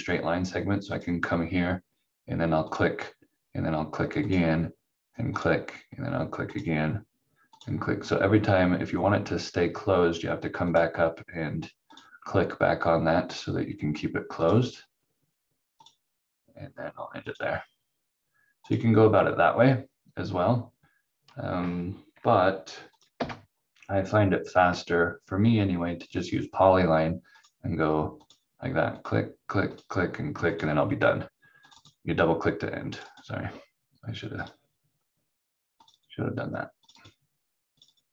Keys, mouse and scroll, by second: 0.9 click, 10.6 click, 22.9 click, 23.2 Delete, 24.5 click.